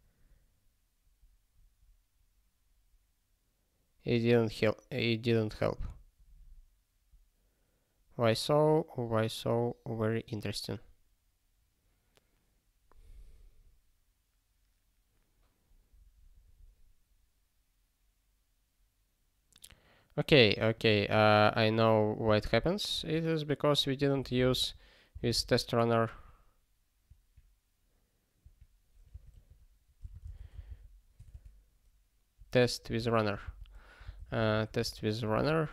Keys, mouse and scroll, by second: 20.7 click, 22.3 Return, 22.9 (, 24.2-25.1 typing, 26.1 BackSpace, 29.8-30.9 typing, 32.8 ctrl+g, 33.4 alt+b, 34.1 t, 34.9 alt+f, 35.6 r.